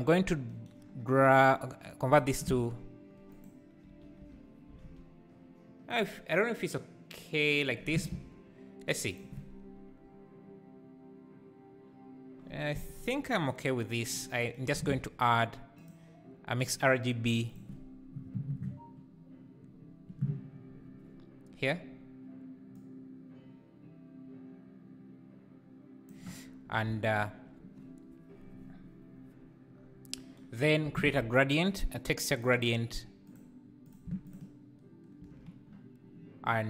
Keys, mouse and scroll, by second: 16.7 shift+a, 22.9-25.7 drag, 33.4 shift+a, 34.4 ctrl+shift+click.